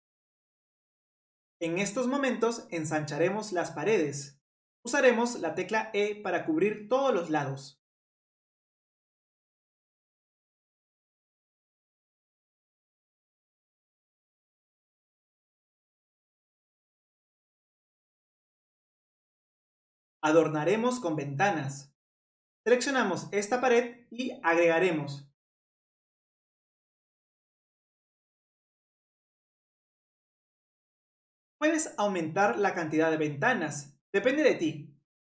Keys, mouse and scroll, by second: 1.4 click, 2.2-4.7 middle drag, 4.7 click, 5.6 middle click, 6.2 e, 7.7 middle click, 8.6 click, 9.0 middle click, 9.3 click, 9.9 middle click, 10.3 click, 11.0 middle click, 11.4 click, 13.0 scroll up 1, 13.0 middle click, 13.8 scroll down 1, 13.9 click, 14.1 e, 14.8 click, 17.6 middle click, 18.1 click, 18.2-19.0 scroll down 1, 19.2 middle click, 20.5 scroll up 2, 20.7-22.1 middle drag, 22.1 click, 24.2-24.9 drag, 24.9-26.6 middle drag, 26.6 click, 29.0 ctrl+z, 30.8-35.2 drag.